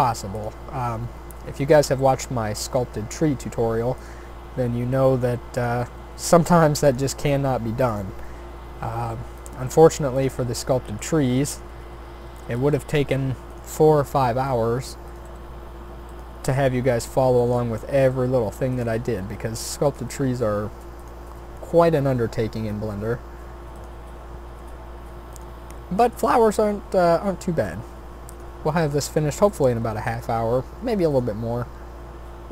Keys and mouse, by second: 1.0 s, 2.0 g, 2.9 e, 4.5 e, 6.0 s, 7.3 e, 8.3 s, 9.7 g, 11.0 click, 12.6 shift+d, 13.9 r, 15.2 g, 16.4 e, 17.6 s, 19.1 e, 20.1 s, 22.0 e, 24.2 e, 25.8 s, 27.3 e, 28.7 s, 29.8 e, 31.5 s.